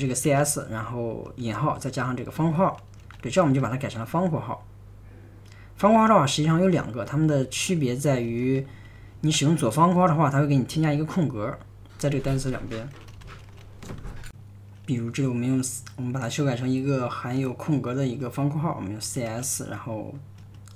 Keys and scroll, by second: 0.0-5.5 typing, 6.9-10.5 typing, 12.3-14.0 typing, 18.8-20.7 typing.